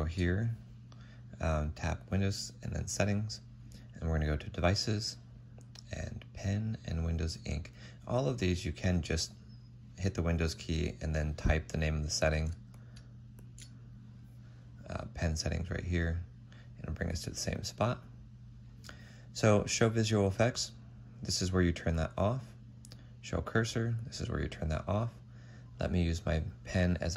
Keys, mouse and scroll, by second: 13.1-13.9 typing, 15.8 typing.